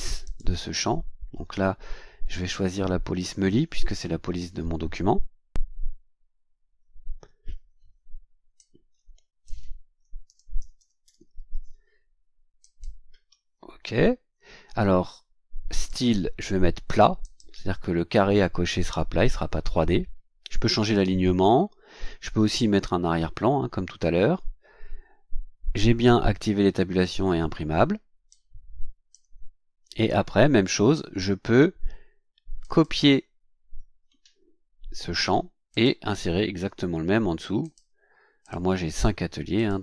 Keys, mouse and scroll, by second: 0.2 click, 8.5-9.6 drag, 10.0-11.5 typing, 12.6 click, 15.7 click, 17.2 click, 28.3-29.3 drag, 32.6 click, 35.1 ctrl+c, 35.7 ctrl+click, 36.5 ctrl+v, 37.6 ctrl+click, 38.4 ctrl+click, 38.9 ctrl+v, 39.5 click.